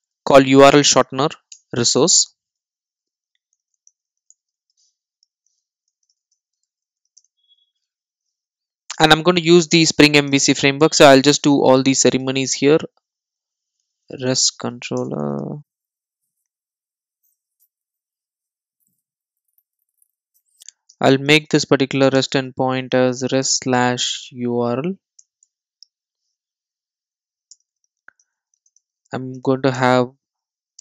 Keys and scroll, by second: 17.6 Return, 20.3 Return, 29.8 Return.